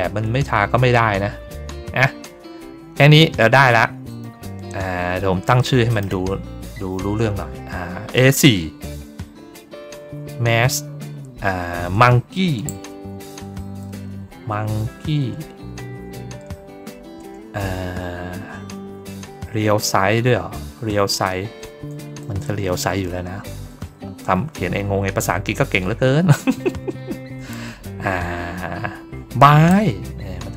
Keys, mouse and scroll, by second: 0.6 ctrl+middle click, 1.8 ctrl+middle click, 4.0 click, 5.8 click.